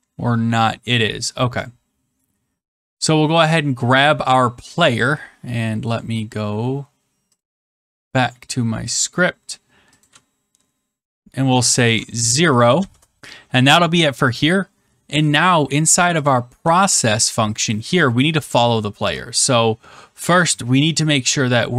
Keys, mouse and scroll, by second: 1.6 click, 4.8 click, 7.3 click, 8.9 click, 11.4-13.2 typing, 12.7 Left, 16.2 click, 16.5 BackSpace, 16.8 click, 16.8 BackSpace, 17.5 click, 18.9 Return.